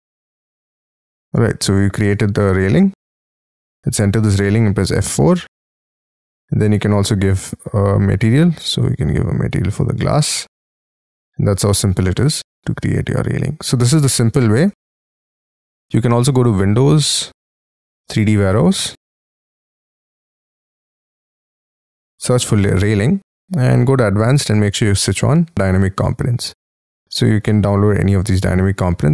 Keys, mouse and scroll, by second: 0.2-0.7 scroll up 6, 0.7 space, 1.0 scroll up 3, 1.3 Escape, 2.3 middle click, 3.4 double click, 3.9-4.3 scroll up 5, 4.3 F3, 5.2 Escape, 5.5 Escape, 5.9 middle click, 6.9-7.8 scroll down 2, 8.5 space, 8.9 double click, 9.1 double click, 9.3 double click, 9.5 b, 9.9 space, 10.0 Escape, 10.3 Escape, 10.5-11.3 scroll down 17, 11.6 shift+middle click, 12.1 middle click, 13.8 scroll down 5, 14.3 shift+middle click, 23.9 scroll down 4, 26.3-27.1 scroll down 2, 27.1-27.9 scroll down 2, 27.9-29.1 scroll down 1.